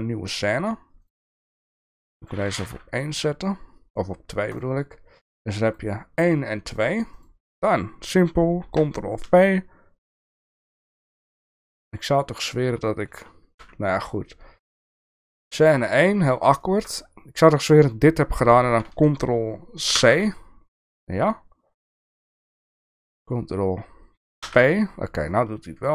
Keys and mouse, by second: 1.1-4.6 drag, 5.6 click, 9.4 ctrl+v, 11.7 shift+middle click, 13.6 Delete, 15.0 click, 16.6 shift+middle click, 19.9 ctrl+c, 22.1 click, 24.5 ctrl+v.